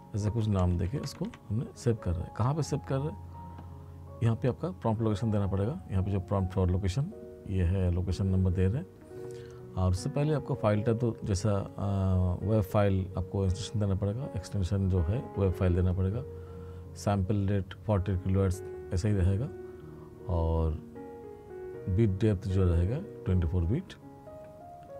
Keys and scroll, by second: 0.2 f.